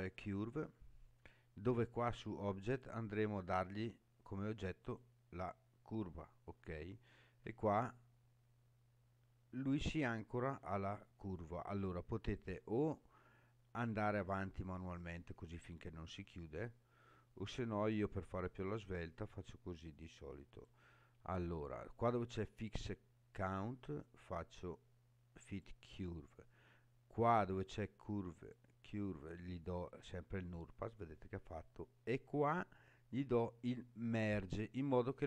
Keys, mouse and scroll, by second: 2.7-5.0 drag, 7.3-11.2 scroll down 7, 12.4-20.8 drag, 24.0-25.8 drag, 28.4-30.2 drag, 34.1 click.